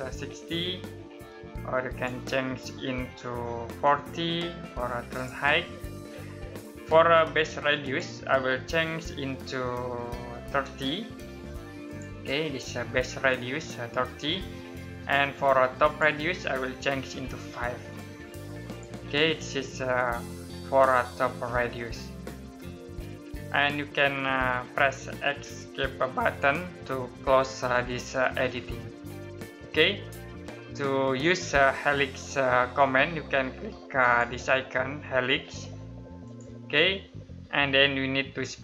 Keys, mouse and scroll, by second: 1.5 click, 3.3-3.8 typing, 4.7 click, 7.4 click, 10.0-11.1 typing, 11.4 click, 15.4 click, 17.3 typing, 18.3 click, 27.7 middle click, 28.2 scroll up 1, 28.5 Escape, 29.6 middle click, 33.6 click, 37.2 middle click.